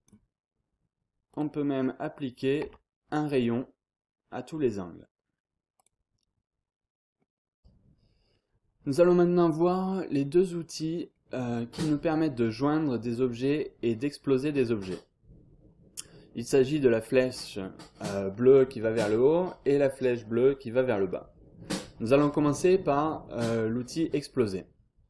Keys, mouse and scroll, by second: 1.3 click, 1.8-2.8 scroll up 1, 2.6 Tab, 5.8 click, 6.6-7.1 scroll up 1, 7.1-7.6 scroll down 2, 8.0-8.9 scroll up 2, 9.6 click, 10.3 scroll down 2, 10.6-11.1 scroll up 1, 11.1-11.7 scroll down 1, 11.9 scroll down 1, 12.1-12.8 scroll up 1, 13.2-13.7 scroll down 1, 14.6-15.1 scroll up 1, 25.0 scroll down 1.